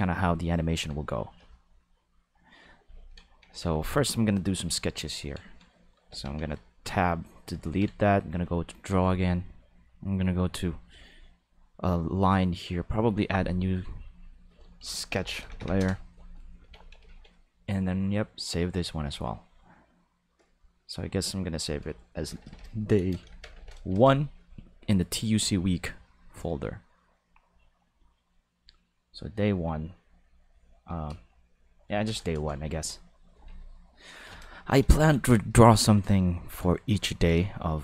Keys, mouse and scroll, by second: 1.8 click, 2.1 click, 6.1 Tab, 6.4 a, 6.9 x, 7.2 click, 7.6 ctrl+Tab, 8.2 click, 10.9 click, 13.2 click, 14.0 click, 14.1 click, 15.1 k, 15.6 h, 15.8 Return, 16.7 ctrl+s, 21.5 click, 22.2-23.5 typing, 23.9 Return, 28.5 click, 29.0 click, 30.9 space, 31.8 Left, 32.0 Return, 32.3 Return, 34.1 ctrl+s.